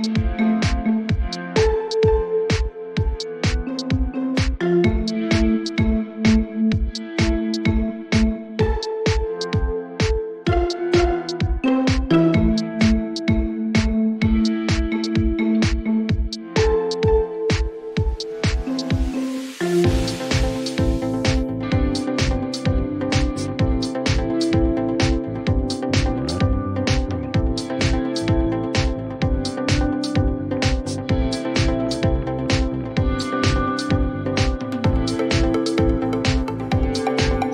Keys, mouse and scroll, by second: 4.4 click, 6.2 click, 8.8 click, 12.3 click, 17.6 click, 19.1 click, 23.2 click, 25.3 click, 26.9 click, 29.1 click, 30.5 click, 31.0 click, 34.7 click, 35.1-36.0 typing, 35.3-37.5 drag, 36.2 Return.